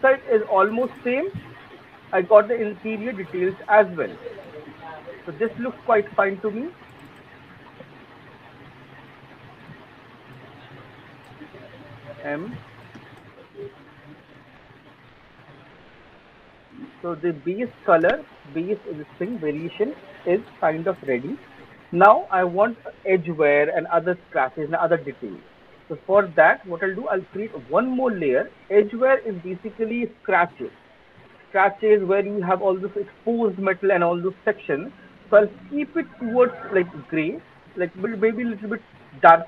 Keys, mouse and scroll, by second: 0.5 click, 0.9 click, 1.7 alt+click, 3.0 alt+middle click, 3.3 alt+middle click, 4.3 alt+click, 4.6 alt+middle click, 6.3 click, 7.5 alt+middle click, 7.9 alt+click, 8.9 alt+click, 9.1 alt+middle click, 9.3 alt+right click, 9.9 click, 10.3 click, 10.8 click, 11.1 click, 12.1 m, 15.9 click, 16.4 alt+middle click, 16.6 alt+right click, 18.3 alt+click, 18.9 alt+middle click, 21.8 alt+click, 26.8 click, 35.3 click, 38.8 click.